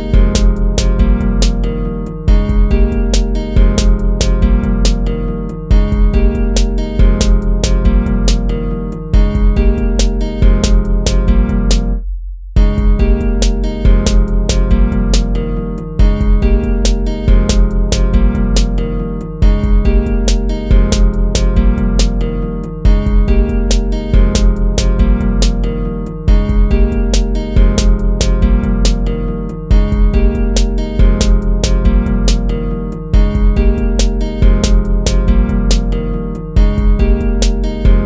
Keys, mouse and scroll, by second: 4.9 ctrl+z, 8.0 ctrl+z, 8.6 ctrl++, 14.5 ctrl+-, 20.2 ctrl+-, 27.9 ctrl+-, 29.5 ctrl++.